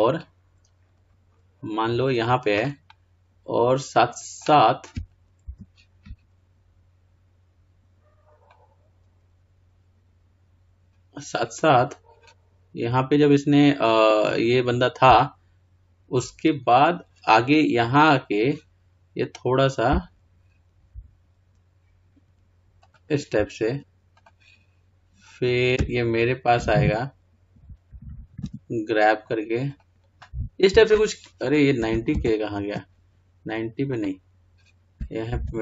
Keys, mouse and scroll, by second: 18.2-23.3 drag, 24.6-29.9 drag, 29.9 g, 32.5 ctrl+z, 34.4-35.6 drag.